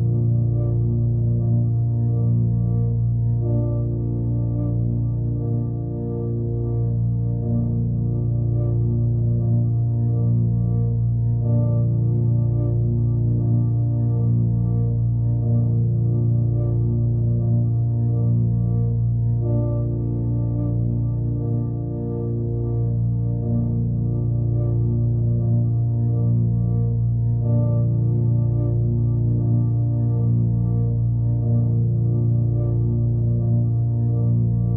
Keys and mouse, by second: 3.4 alt+middle click, 5.2 middle click, 5.8-8.2 alt+middle drag, 9.7-10.3 drag, 11.8 alt+middle drag, 14.0 click, 16.4 click, 17.5 alt+middle drag, 18.3 middle drag, 18.6-20.0 alt+middle drag, 21.4-22.6 shift+drag, 22.8 alt+middle drag, 24.5 click, 25.3 click, 26.3-27.3 drag, 27.4-28.5 drag, 29.3-30.2 drag, 31.7-32.7 drag, 33.7-34.2 alt+middle drag, 34.6 middle drag.